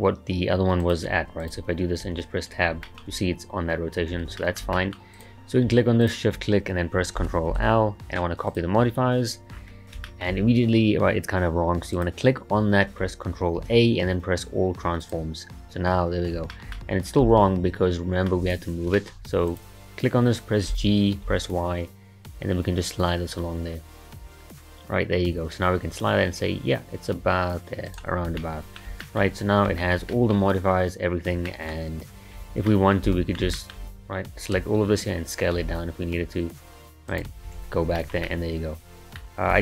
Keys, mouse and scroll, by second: 1.4 click, 2.1 Tab, 2.6 scroll down 2, 2.9-4.1 shift+middle drag, 4.1 Tab, 4.4-5.1 shift+middle drag, 5.1 click, 6.0 shift+click, 7.5 ctrl+l, 9.5-10.1 scroll down 4, 10.1-10.4 shift+middle drag, 10.4-11.9 scroll up 1, 11.9 click, 13.6 ctrl+a, 16.5-19.5 shift+middle drag, 19.5 click, 20.7 g, 28.4-29.3 middle drag, 29.3-29.8 scroll up 2, 29.8-32.4 shift+middle drag, 32.4 Tab, 32.7-34.6 middle drag, 34.6 a, 35.6 s, 37.5 Tab, 38.0-39.5 shift+middle drag, 39.5 s.